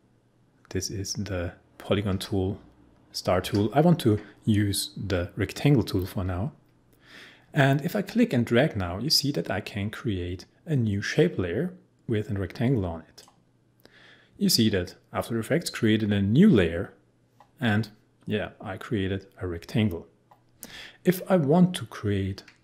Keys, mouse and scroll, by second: 7.4 ctrl+z, 7.9-15.6 drag.